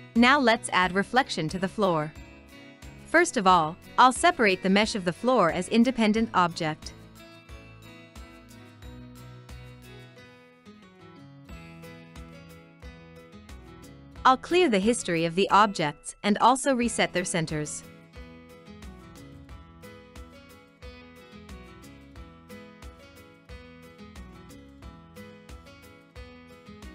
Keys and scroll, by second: 26.0 Delete, 26.0 ctrl+z.